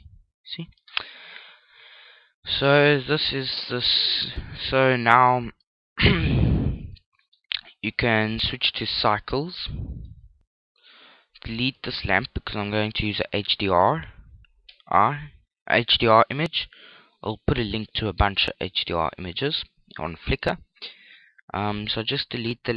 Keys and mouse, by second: 0.4 Tab, 2.2-4.0 middle drag, 5.5 KP_5, 6.4 middle click, 7.5 middle click, 8.6 click, 10.5 middle click, 11.2 right click, 12.5 c, 13.3 right click, 14.2 x.